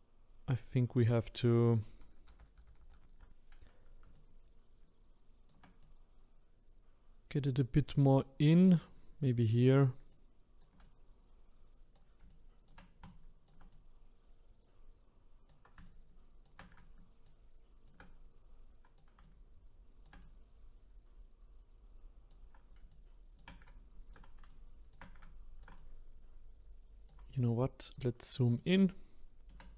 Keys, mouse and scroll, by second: 2.3 ctrl+z, 2.6 ctrl+z, 4.1-8.8 shift+right drag, 10.1-27.8 shift+right drag, 27.8-28.6 scroll up 3, 28.6-29.7 shift+middle drag.